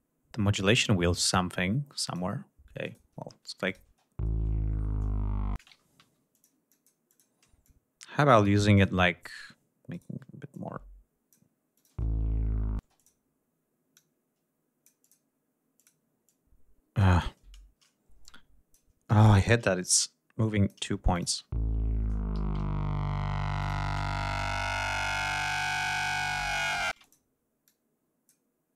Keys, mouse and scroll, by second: 2.8 click, 3.6 click, 3.9 space, 5.5 space, 5.8 ctrl+scroll up 1, 6.1 ctrl+d, 6.3 ctrl+click, 6.7 ctrl+click, 7.1 ctrl+click, 7.6 ctrl+click, 8.7 click, 9.2 click, 9.9 shift+right click, 10.5 shift+click, 11.7 click, 11.9 space, 12.8 space, 13.0 click, 13.9-15.3 drag, 15.8 click, 16.2 click, 18.2 shift+click, 19.3 shift+right click, 19.9 shift+click, 21.2 click, 21.3 space, 22.3 g, 22.6 ctrl+scroll down 2, 23.6 click, 24.6-24.9 ctrl+shift+scroll up 2, 25.6 d, 26.9 space, 27.0 click, 27.6 click.